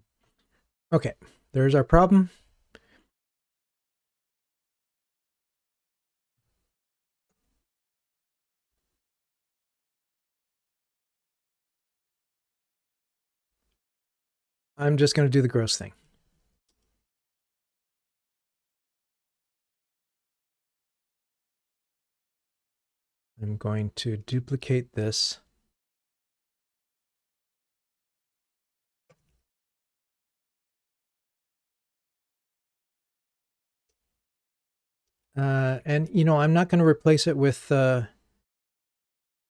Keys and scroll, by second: 7.4 ctrl+Tab, 21.5 alt+Up, 26.0 super+d.